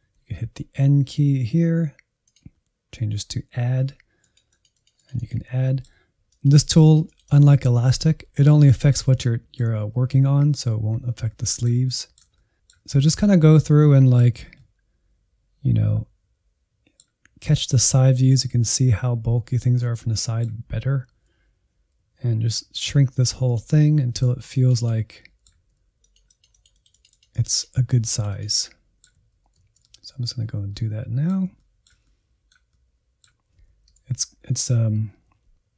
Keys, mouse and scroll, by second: 0.1 n, 2.2-3.5 drag, 3.5 n, 4.2-5.5 drag, 5.5 middle click, 6.3-9.2 drag, 9.2-12.3 middle drag, 12.3 alt+z, 12.4-13.5 middle drag, 13.5 alt+z, 13.8 middle click, 14.2 alt+z, 14.6-21.1 middle drag, 21.1 n, 21.7 click, 21.9 n, 22.1 click, 22.4 middle click, 22.8 alt+z, 23.0-24.1 drag, 24.1 middle click, 24.6 alt+z, 24.7-26.4 middle drag, 26.4 scroll up 2, 26.6-29.3 drag, 29.3-30.6 middle drag, 30.6 click, 30.8 scroll down 1, 31.0-32.2 middle drag, 32.2 click, 32.5 middle click, 32.8 click, 33.1 shift+middle click, 33.6 alt+z.